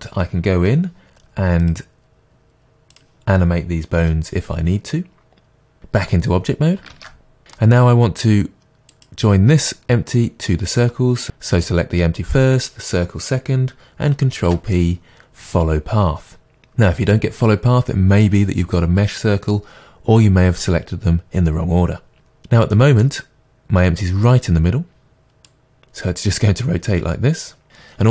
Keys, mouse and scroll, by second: 1.6-5.8 drag, 4.0 r, 5.8 right click, 6.9 ctrl+Tab, 7.4 scroll down 2, 7.6-9.0 middle drag, 9.0 click, 11.2 shift+click, 14.3 ctrl+p, 22.3-22.8 scroll down 2, 22.8-25.5 middle drag, 25.5-28.1 drag.